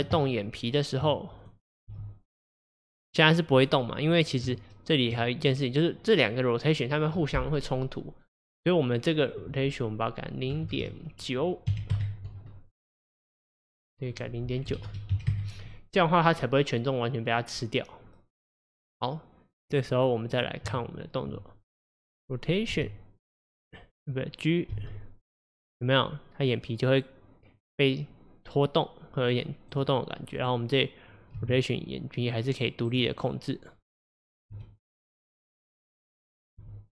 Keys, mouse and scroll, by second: 0.2 Tab, 1.5 click, 1.9 g, 4.2 click, 4.5 Tab, 5.4 click, 8.5-12.3 drag, 13.2 click, 14.2-17.2 drag, 19.8 click, 20.4 click, 20.7 Tab, 21.9 click, 22.8 r, 24.8 g, 30.4 click, 31.4 r, 33.3 click, 34.0 click, 34.6 r, 36.2 click, 36.6 r.